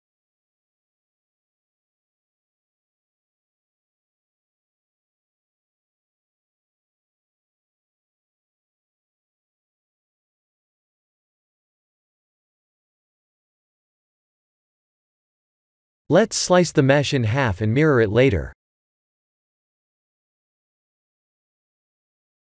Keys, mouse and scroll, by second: 0.1 middle click, 0.3 middle click, 0.8 middle click, 1.2 middle click, 1.7 g, 6.4 middle click, 8.5 shift+z, 8.9 middle click, 9.4-10.7 middle click, 9.8 middle click, 10.5 middle click, 11.3 middle click, 12.3 3, 13.3 click, 15.3 KP_1, 15.8 shift+z, 16.5 click, 16.9 b, 18.9 x, 20.7 middle click, 20.8 middle click, 21.0 middle click, 21.2 middle click.